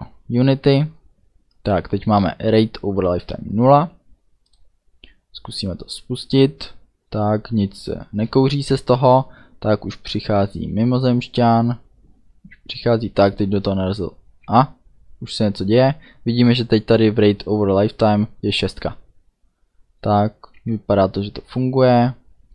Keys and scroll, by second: 20.6 d, 21.8 a.